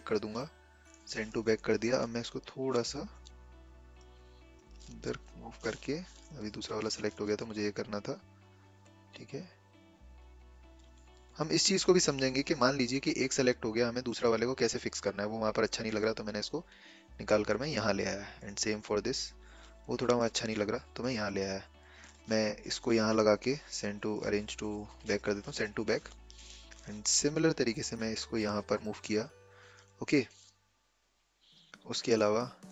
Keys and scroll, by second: 6.0 ctrl+z.